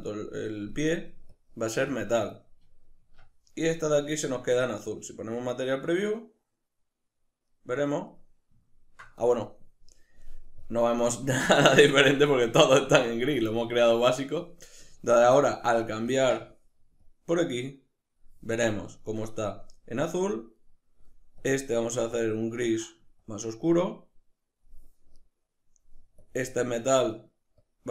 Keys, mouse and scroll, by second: 1.3 click, 1.9 click, 3.0 Tab, 4.1 z, 7.5-13.4 middle drag, 13.4 click, 16.1 click, 18.7-20.6 middle drag, 20.6 right click, 21.4 click, 22.2 click, 25.1 right click, 26.2 click, 27.6-27.9 drag.